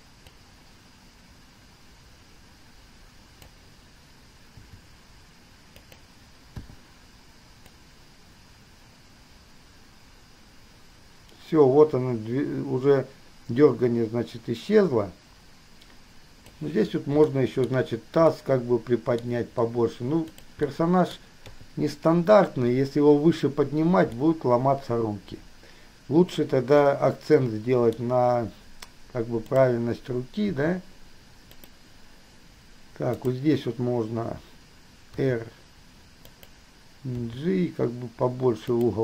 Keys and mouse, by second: 0.5-3.7 drag, 4.8 g, 6.8 i, 7.9-16.8 drag, 17.7 shift+middle drag, 18.4-20.7 middle drag, 20.9-21.7 middle drag, 21.7 KP_3, 24.4-28.2 middle drag, 29.8 drag, 30.7 r, 33.3 click, 35.4 r, 37.4 g.